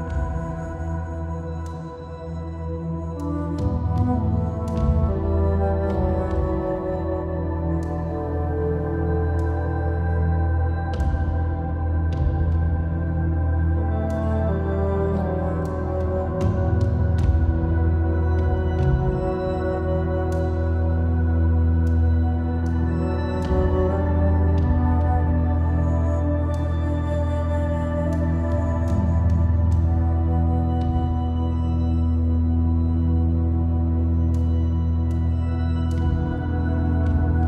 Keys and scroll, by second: 20.2-21.6 typing, 30.1 super+t.